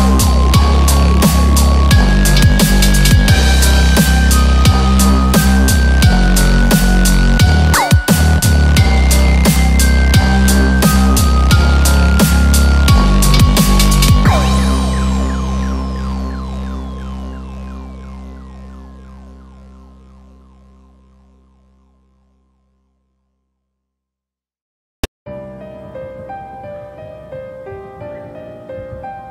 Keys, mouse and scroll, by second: 0.9 alt+z, 1.4 scroll down 2, 1.6 middle click, 2.7 scroll up 3, 2.9 middle click, 3.9 scroll down 2, 4.1 middle click, 4.4-4.9 scroll down 1, 4.9 scroll down 1, 5.3 click, 5.5-5.9 scroll down 2, 5.8 middle click, 6.5 click, 6.8 click, 7.2 scroll down 1, 7.4 middle click, 7.7-8.1 scroll up 5, 8.1 middle click, 9.5 scroll up 1, 10.2 click, 10.6-11.6 scroll down 4, 12.4 g, 12.9 z, 14.7 click, 15.9 g, 18.9 middle click, 19.2 KP_7, 20.2 scroll up 6.